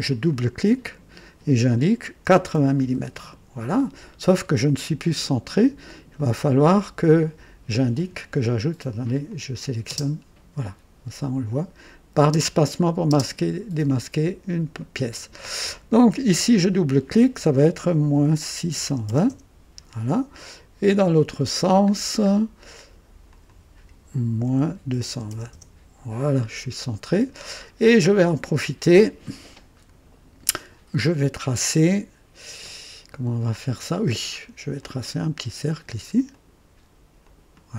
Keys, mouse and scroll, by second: 0.0 click, 2.2 KP_8, 2.5 KP_0, 2.9 KP_Enter, 2.9 Return, 6.1-6.9 right drag, 7.9 click, 9.2 click, 9.9 space, 12.1 space, 13.0 space, 16.5 click, 18.1 KP_Subtract, 18.6 KP_6, 18.8 KP_2, 19.0 KP_0, 19.2 KP_Enter, 21.9 scroll down 1, 23.2 click, 24.4 KP_Subtract, 24.8-25.7 typing, 25.5 Return, 27.6 scroll up 1, 28.2-29.2 right drag, 34.7 click, 36.2 click, 37.2 click.